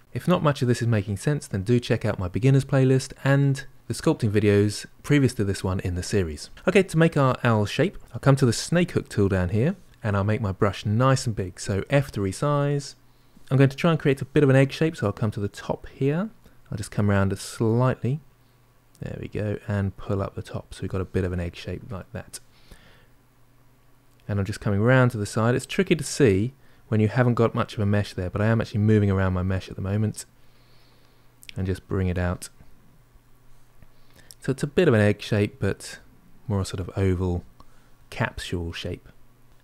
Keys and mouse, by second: 8.5-11.1 drag, 11.6 f, 13.3 middle click, 16.2-18.8 middle drag, 18.8-21.1 drag, 21.1-28.4 middle drag, 29.2-30.4 middle drag, 30.4-31.5 drag, 31.5-32.7 middle drag, 32.7 click, 33.5-34.5 middle drag, 34.5-37.8 drag, 37.8-39.0 middle drag, 39.0 click, 39.5-39.6 middle drag.